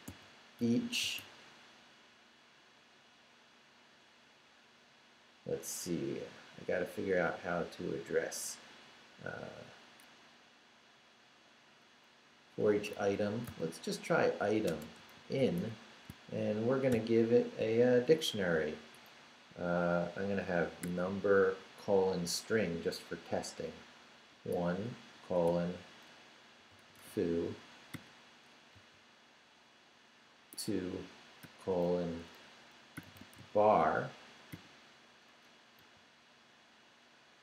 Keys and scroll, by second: 0.0-1.1 typing, 12.4-13.5 typing, 14.7-16.9 typing, 20.8 i, 24.5 shift+;, 25.4 shift+', 26.8 o, 27.9 ', 30.5 2, 31.4 shift+;, 32.7-34.5 typing, 35.8 ,.